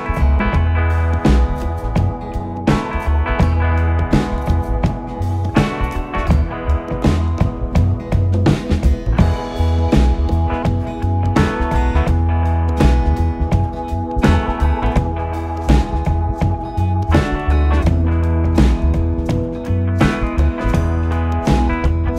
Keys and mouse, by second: 0.9 e, 3.5 click, 5.1 s, 8.4 click, 10.4 e, 15.7 click, 17.7 s, 20.9 click.